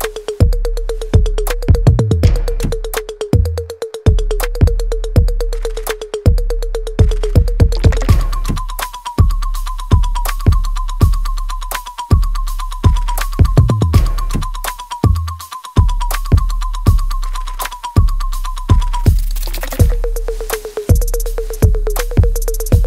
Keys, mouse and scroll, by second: 0.6 click, 0.8 alt+right click, 1.1-2.6 alt+drag, 2.6 alt+right click, 2.9 alt+middle click, 3.4 alt+right click, 3.7 alt+click, 4.4 alt+middle click, 6.1 click, 9.3 right click, 9.9 click, 10.2 alt+right click, 10.7 alt+click, 12.3 alt+right click, 13.3 alt+middle click, 13.7 right click, 14.9 click, 16.9 shift+click, 17.4 alt+middle click, 19.4 shift+click, 19.9 alt+middle click, 20.4-21.8 alt+right drag.